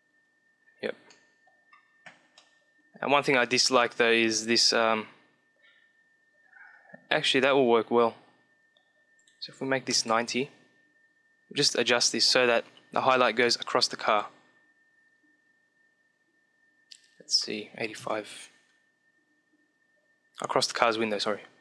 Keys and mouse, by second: 1.2-3.6 middle drag, 8.8-10.7 drag, 10.7 middle click, 14.0-15.5 drag.